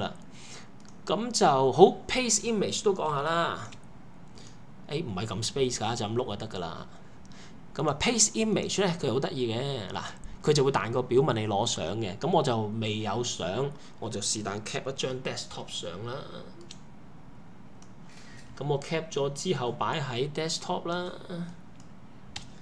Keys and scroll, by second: 3.1-3.7 typing, 15.5 shift+super+4, 22.4 Return.